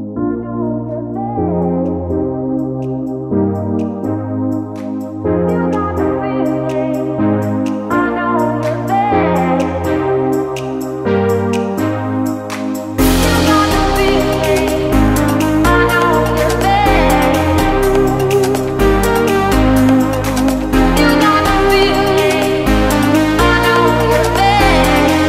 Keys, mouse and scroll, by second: 10.2 click.